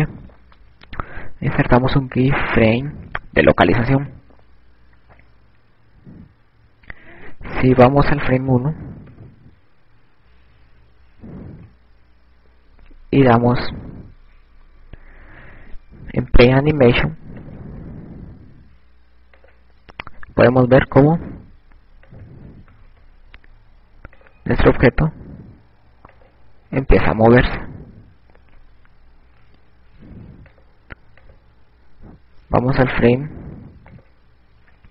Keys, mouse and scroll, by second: 1.1 click, 10.6 click, 12.9 ctrl+Tab, 19.0 click, 21.1 click, 24.1 click, 31.7 click.